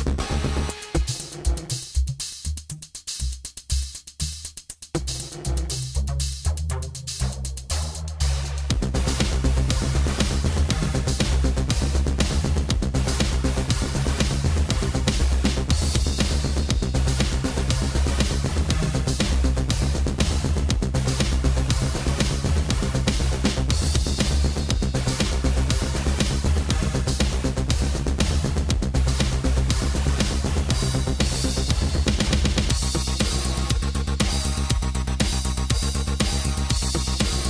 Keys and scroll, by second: 6.6 space, 13.2 space, 20.1 space.